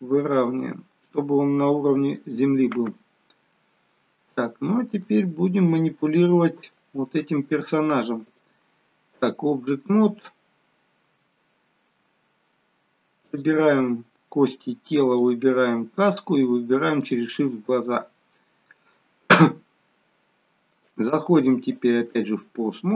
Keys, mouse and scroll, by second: 2.9-3.6 scroll up 4, 3.6 middle click, 4.4 shift+middle click, 5.2 middle click, 6.3 shift+middle click, 11.6 shift+middle click, 12.1-13.2 scroll up 1, 13.2 click, 13.2-14.2 scroll up 2, 14.2-15.0 scroll up 1, 15.0 shift+click, 15.0 scroll up 1, 17.4 shift+click, 17.9-19.7 scroll down 7, 20.7 click, 22.6-22.9 scroll up 1.